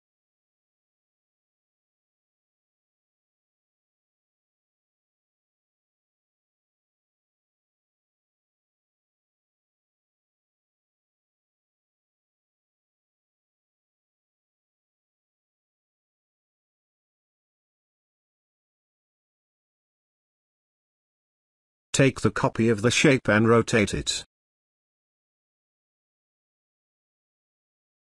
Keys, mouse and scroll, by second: 4.5 right click, 7.7-11.0 drag, 11.0 click, 11.3 space, 12.3-13.8 drag, 14.0 space, 14.1-14.7 click, 17.9-18.5 click, 25.6-28.0 shift+drag.